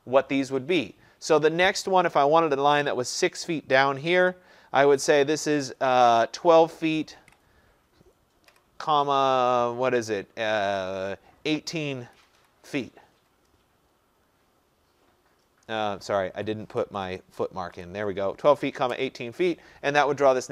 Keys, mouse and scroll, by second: 6.9-8.5 typing, 12.2-13.2 typing, 16.4 BackSpace, 16.7 BackSpace, 16.9 BackSpace, 17.1 BackSpace, 18.9 Return.